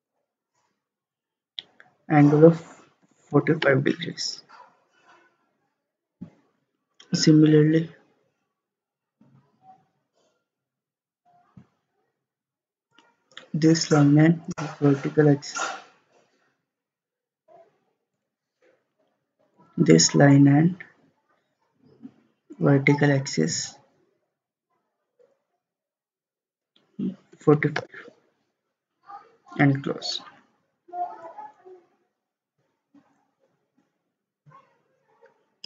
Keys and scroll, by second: 3.1 typing, 3.7 Return, 27.2-28.1 typing.